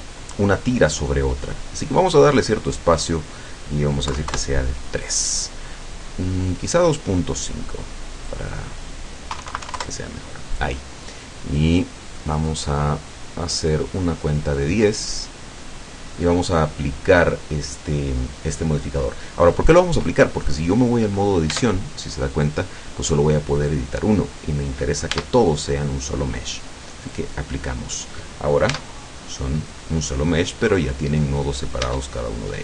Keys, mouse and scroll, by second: 2.0 click, 2.7 click, 4.1 KP_3, 4.3 KP_Enter, 6.5 click, 8.3 click, 9.4 KP_2, 9.4 KP_Decimal, 9.8 KP_Enter, 12.2 click, 13.1 click, 13.6 click, 14.7 click, 21.5 Tab, 25.1 Tab, 27.1 click, 28.7 Tab, 31.9 Tab.